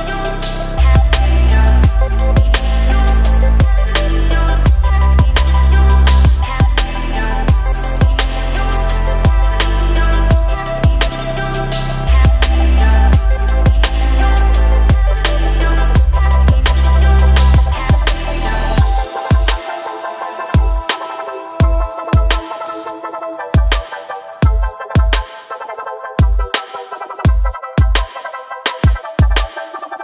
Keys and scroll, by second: 1.2 ctrl+shift+b, 20.6 Tab.